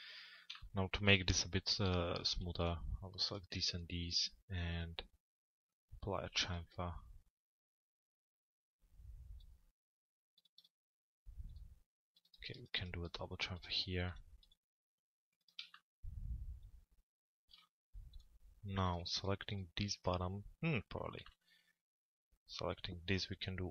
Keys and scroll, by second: 23.3 l.